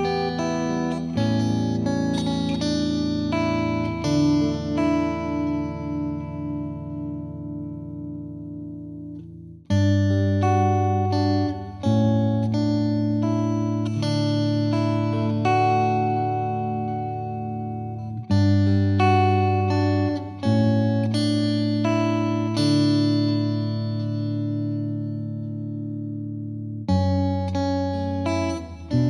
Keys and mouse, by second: 0.2 click, 0.4 Escape, 0.9 alt+click, 1.8 click, 2.1 click, 3.5 F3, 3.8 click, 4.5 click, 5.1 F2, 7.4 click, 16.1-17.3 drag, 22.5-23.7 drag.